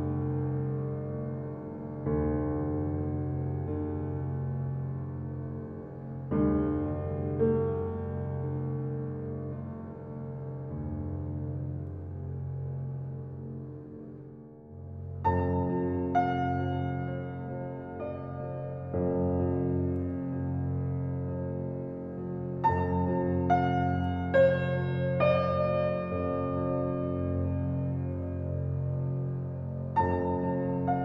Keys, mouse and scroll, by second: 0.4 shift+click, 0.7 shift+click, 1.4 shift+click, 1.7 shift+click, 2.1 shift+click, 2.5 shift+click, 2.7 scroll up 2, 3.4 ctrl+b, 4.7 ctrl+click, 5.1 ctrl+click, 5.6 ctrl+click, 6.2 ctrl+b, 7.7 click, 8.0 shift+click, 8.4 shift+click, 9.0 ctrl+b, 11.4 right click, 11.9 click, 12.5 ctrl+z, 13.1 shift+click, 13.8 click, 14.2 shift+click, 14.8 shift+click, 15.5 shift+click, 15.8 shift+click, 16.4 e, 18.8 Tab, 19.2-19.6 middle drag, 19.6-20.0 scroll down 3, 20.0 middle click, 20.3 click, 20.6-20.9 scroll down 2, 20.9 click, 21.5 scroll down 1, 21.8-22.5 middle drag, 22.5 click, 22.9-23.5 scroll up 10, 23.5 click, 23.9 middle click, 24.8 ctrl+z, 25.0 ctrl+z, 25.2 ctrl+z, 25.3 ctrl+z, 25.5 ctrl+z, 26.0 ctrl+z, 26.2 ctrl+z, 26.5 ctrl+z, 26.7 ctrl+z, 26.9 ctrl+z, 27.3 ctrl+z, 27.6 ctrl+z, 29.0 ctrl+b.